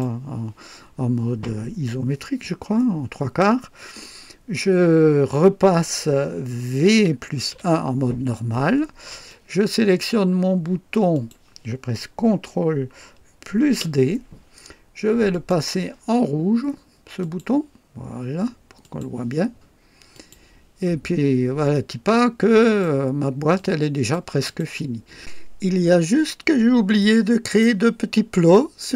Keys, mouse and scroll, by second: 6.9 v, 7.5 KP_1, 9.3-10.2 drag, 11.1 click, 13.7 ctrl+d, 15.3 click, 17.2 click, 18.8 click, 20.1 click, 21.0 scroll down 1, 21.7-23.0 drag, 23.5-24.3 drag, 24.4 click, 27.0-27.8 drag.